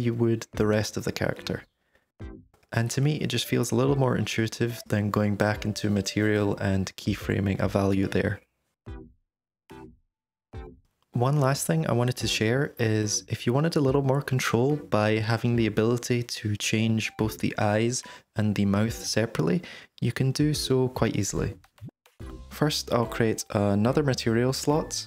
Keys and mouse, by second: 0.0-0.7 typing, 0.9 drag, 1.8 shift+space, 3.8 shift+space, 5.0 r, 5.2 r, 6.0 i, 7.4 shift+d, 7.7 shift+space, 20.3 click, 21.5 click, 22.4 click, 24.4 click.